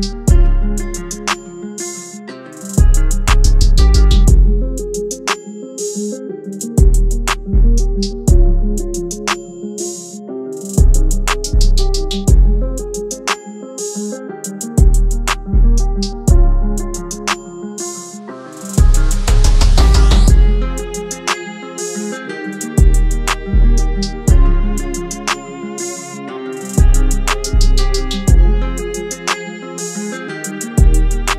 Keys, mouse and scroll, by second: 26.0 alt+click, 29.3 double click.